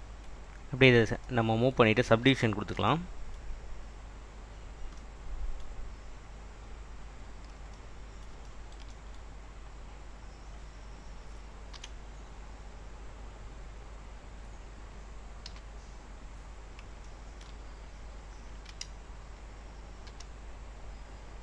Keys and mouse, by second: 5.0 middle click, 10.4 click, 11.8 r, 14.1 click, 15.5 g, 17.3 shift+middle click, 19.6 click, 20.2 g.